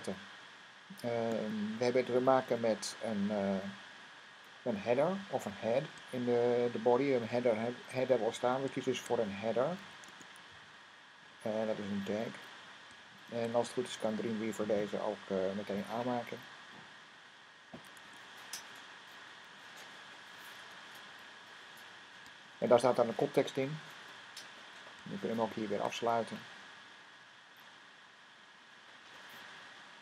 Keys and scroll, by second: 9.2-14.7 typing, 17.6-17.9 typing, 20.1 Down, 22.3 shift+., 25.5 shift+,, 28.0-29.2 typing.